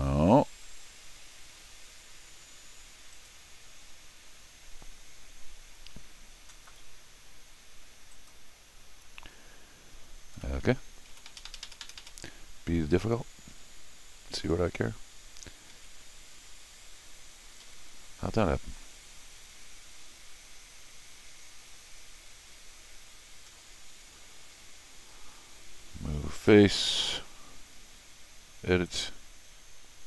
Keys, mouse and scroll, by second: 0.6 click, 3.1 right click, 8.1 click, 10.4 middle click, 11.1 Tab, 11.3 Tab, 11.5 Tab, 11.6 Tab, 11.8 Tab, 12.0 Tab, 15.7 Tab, 17.6 ctrl+z, 18.4 middle click, 19.2 scroll up 1, 23.5 scroll down 1, 26.4 click, 28.9 click.